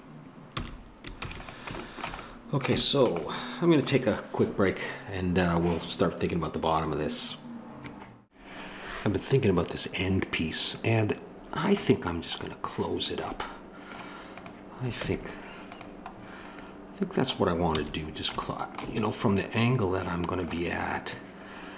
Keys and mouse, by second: 0.6 a, 1.2 ctrl+s, 15.0 Tab, 17.7 a.